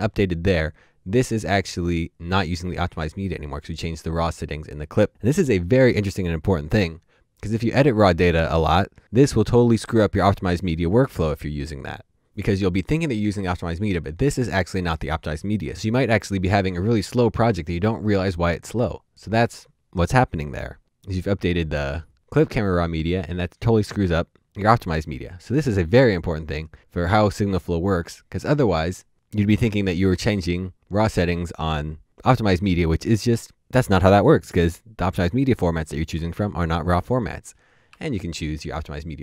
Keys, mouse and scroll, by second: 37.8 Up.